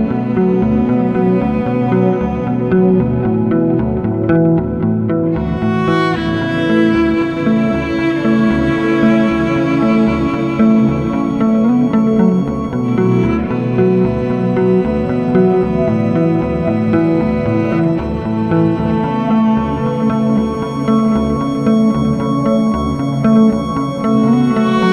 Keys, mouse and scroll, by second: 0.6 f, 2.9 alt+middle click, 5.4 click, 9.5 click, 11.9 click, 14.5 click, 15.2 click, 20.7 click, 21.1-24.1 drag.